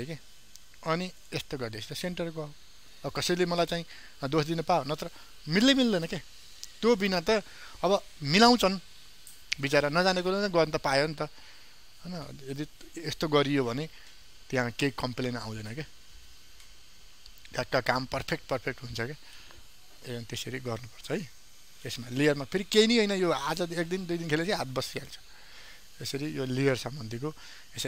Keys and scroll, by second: 21.6 ctrl+d.